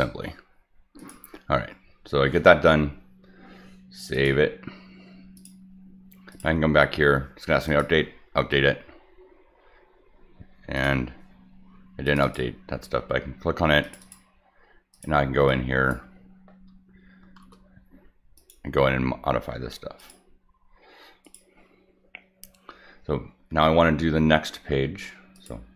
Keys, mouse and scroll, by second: 1.0 click, 4.1 click, 5.3 click, 6.3 click, 7.6 click, 10.7 click, 12.0 click, 12.2 click, 13.8 click, 14.0 click, 14.9 click, 15.5 click, 17.3 shift+w, 18.3 click, 20.0 click, 21.2 click, 25.3 click.